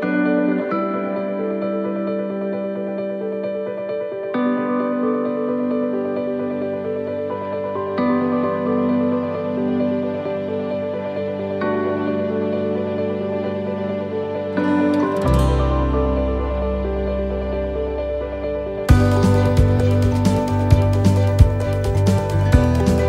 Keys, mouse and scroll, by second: 12.1 middle click, 12.9 shift+middle click, 14.9 c, 18.4 shift+middle click, 20.0 shift+right click, 21.2 shift+right click, 21.6 shift+middle click, 22.4 scroll up 2, 22.8 shift+middle click.